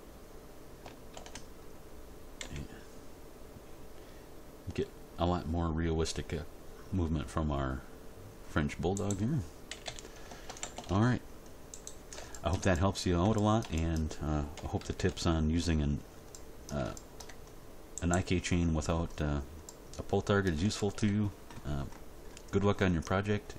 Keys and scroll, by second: 1.1 ctrl+z, 2.4 g, 9.7 a, 10.5 alt+r, 10.6 alt+g, 10.8 alt+s, 14.5 End, 14.8 Page_Down, 15.1 End.